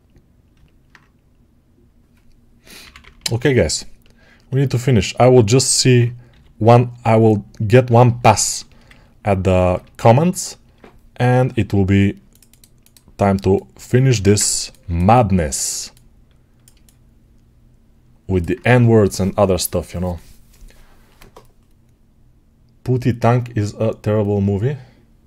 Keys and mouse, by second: 2.7 p, 2.9 [, 3.0 [, 5.8-13.2 drag, 6.2 g, 14.1 ctrl+space.